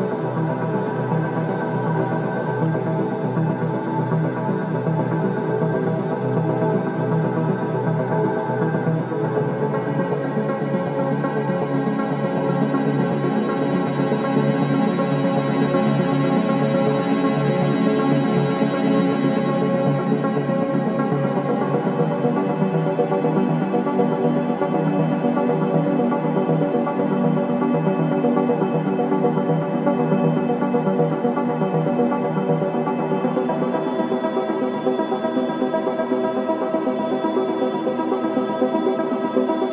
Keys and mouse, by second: 1.0 s, 3.5 click, 5.3 r, 7.2 r, 19.3 click, 22.0 click, 23.4 /, 27.6 shift+s, 30.3 Tab, 31.4 3, 31.8 click.